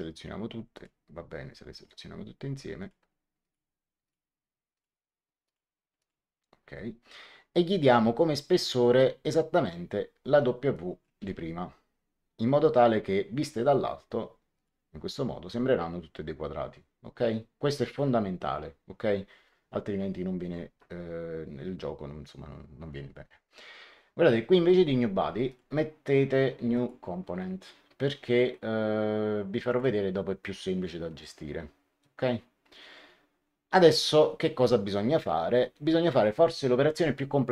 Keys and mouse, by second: 0.6 click, 1.8 click, 10.6 click, 11.1 w, 14.5 click, 25.4 click, 26.6 click, 29.6 click.